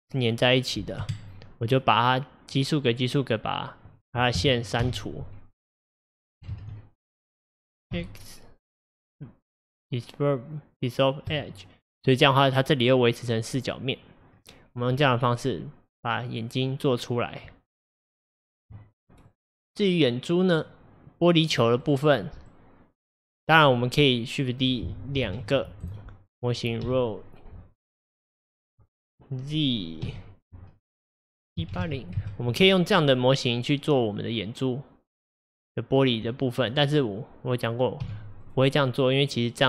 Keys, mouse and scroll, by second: 4.9 x, 6.6 ctrl+z, 8.0 x, 14.4 scroll down 3, 14.8-17.6 middle drag, 17.6 Tab, 19.3 click, 21.9 click, 22.5-25.3 middle drag, 25.3 shift+d, 26.9 r, 34.1-36.3 middle drag, 36.3 Tab, 38.1 x.